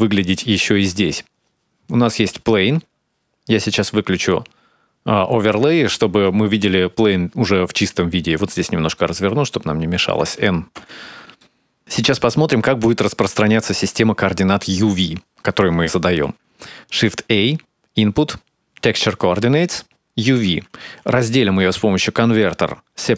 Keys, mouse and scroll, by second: 0.5-1.0 scroll down 1, 1.0-3.6 scroll up 1, 3.6-4.7 scroll up 2, 4.7 click, 7.7 shift+middle click, 9.1 click, 9.7 shift+middle click, 10.3 n, 10.6 ctrl+middle click, 11.1 shift+middle click, 11.5-12.2 scroll down 4, 11.8-12.2 scroll up 1, 17.7 shift+a, 21.8 shift+a, 22.5 shift+a.